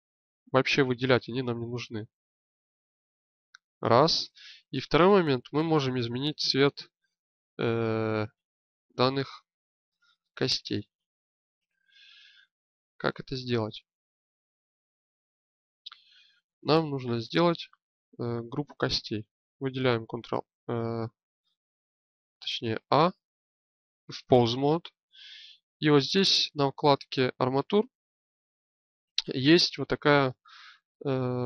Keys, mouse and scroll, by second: 4.1-6.7 drag, 8.0-19.9 drag, 19.9 ctrl+a, 22.3 a, 22.7 a.